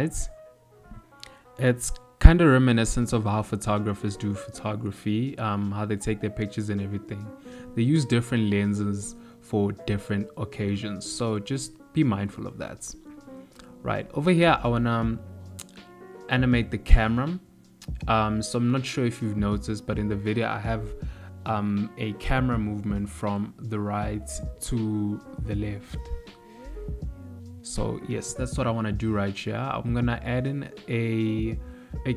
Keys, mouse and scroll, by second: 2.5 middle click, 5.0 ctrl+middle click, 6.9 ctrl+middle click, 7.7 middle click, 9.3 ctrl+middle click, 10.5 middle click, 15.2 click, 17.7 ctrl+middle click, 19.4 shift+middle click, 20.8 i, 22.4 shift+middle click.